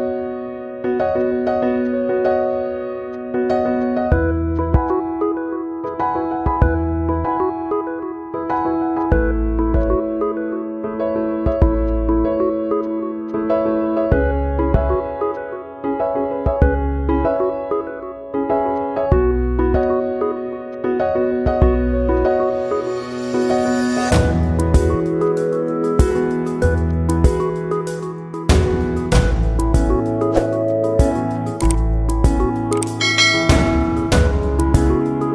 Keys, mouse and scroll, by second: 3.5 alt+click, 4.0 space, 4.8-7.1 drag, 7.3 click, 7.6 space, 7.7 click, 7.8 space, 8.5-11.8 drag, 11.8 space, 12.0 click, 12.2 space, 13.8-16.4 drag, 17.1-19.0 drag, 21.5 ctrl+z, 22.4 click, 24.8 click, 27.2 click, 28.5 click, 29.1 space, 29.2 click, 29.3 space, 31.6-33.0 drag, 33.0 click, 34.5 space, 34.6 click, 34.8 space, 34.9 click.